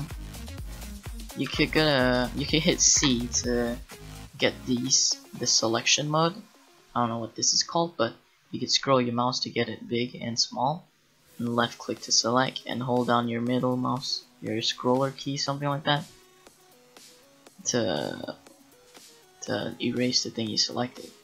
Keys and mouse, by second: 1.5 Tab, 3.0 c.